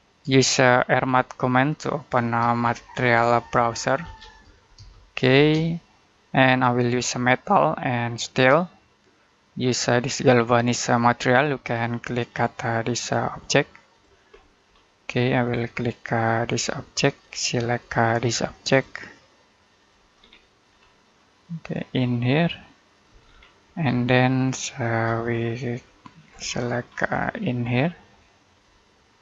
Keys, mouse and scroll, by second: 0.2 shift+middle click, 1.2 middle click, 2.3-5.2 typing, 3.0 Escape, 7.2 click, 11.7 middle click, 12.2-12.5 scroll up 1, 12.9 click, 14.3 middle click, 14.5-15.3 scroll up 1, 15.3 click, 20.0 scroll down 1, 20.3 middle click, 20.6-21.7 scroll up 1, 21.7 click, 23.1-23.5 scroll down 1, 23.5 middle click, 24.0 shift+middle click, 25.1-26.7 scroll up 1, 26.7 scroll down 1, 27.0 middle click, 27.2 scroll up 1, 28.4 click.